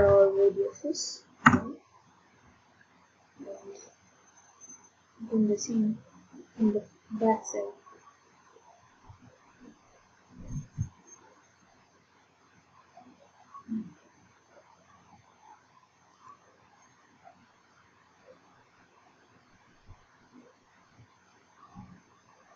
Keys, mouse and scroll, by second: 0.0 1, 1.5 Return, 12.9 middle click, 16.5 ctrl+click, 17.4 ctrl+click.